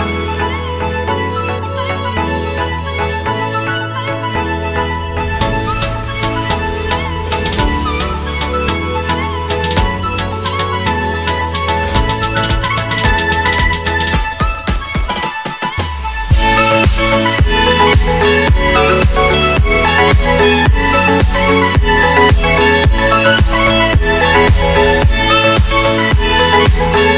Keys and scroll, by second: 2.0 Delete, 15.9 shift+F2, 16.4 Escape.